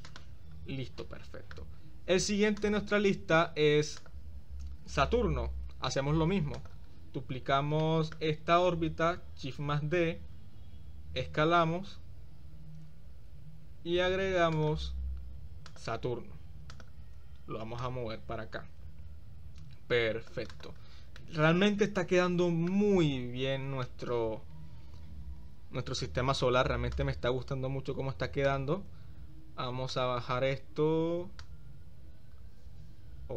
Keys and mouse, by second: 0.1 click, 1.1-1.6 middle drag, 2.6 click, 4.1 click, 6.7 click, 7.9-8.2 shift+middle drag, 9.1 shift+d, 11.3 s, 15.8-16.1 drag, 16.9 shift+click, 17.9-20.5 drag, 20.6 drag, 21.4 middle click, 21.5 drag, 21.7-22.9 middle drag, 23.9-25.2 middle drag, 25.6 middle click, 25.7 click, 27.1 drag, 28.4 shift+click, 31.5-33.3 drag.